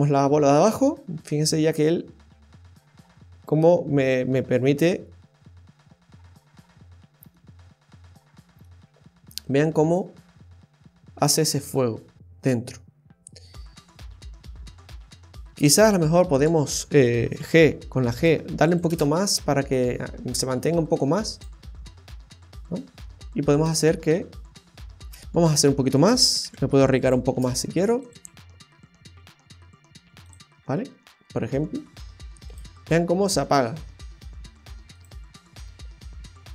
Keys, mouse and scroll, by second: 7.3 middle click, 15.5 space, 16.3 right click, 18.7 click, 18.9 space, 21.3 click, 23.5 click, 25.0 space, 27.3 space, 28.1 click, 30.3 click, 32.5 click, 34.9 click.